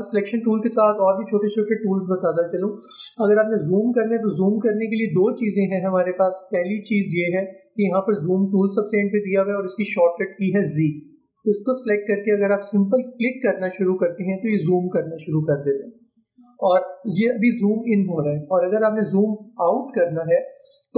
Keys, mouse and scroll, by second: 11.4 click.